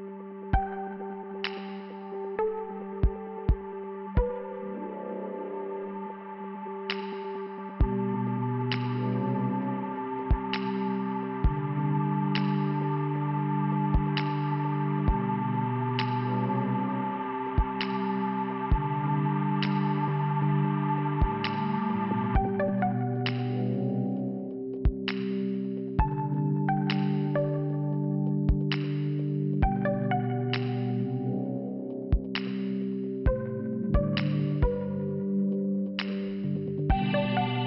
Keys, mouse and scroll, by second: 8.1 click, 8.4 click, 8.7 click, 9.1 click, 9.4 click, 9.7 click, 10.0 click, 10.1 click, 10.3 click, 10.5 click, 10.5 click, 10.7 click, 10.8 click, 11.0 click, 19.4 click, 19.6 click, 20.1 click, 21.5 click, 23.0 click, 25.9 click, 26.0 click, 26.9 click, 27.0 click, 27.6 click, 27.7 click, 27.9 click, 28.0 click, 30.3 click, 37.2 click, 37.5 click.